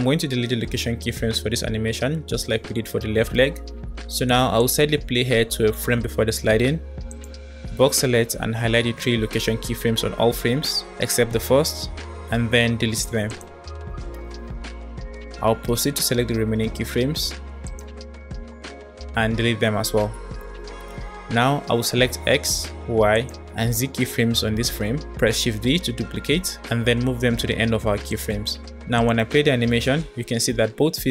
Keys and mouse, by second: 0.4 middle click, 4.1 click, 4.4 click, 7.0 click, 8.3 b, 12.1 x, 17.0 b, 19.5 Delete, 19.5 Delete, 22.2 click, 22.8 shift+click, 23.6 shift+click, 25.1 shift+d, 28.7 click, 28.9 space.